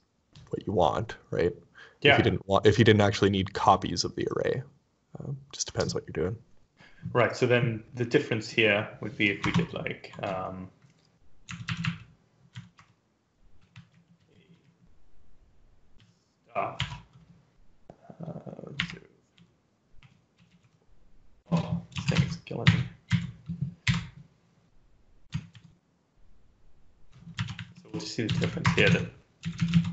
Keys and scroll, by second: 9.4 Return, 11.3 Up, 11.9 Up, 12.1 Up, 12.4 End, 12.8 Return, 13.1-16.7 typing, 18.8-21.0 typing, 21.2 Left, 21.3 Left, 22.1 ctrl+shift+Left, 22.8 Delete, 22.9 End, 23.7 ;, 25.4 ctrl+s, 27.2 Home, 27.6 shift+End, 28.1 ctrl+c, 28.2 Up, 28.7 ctrl+v, 29.2 Left, 29.4 Left, 29.6 Left.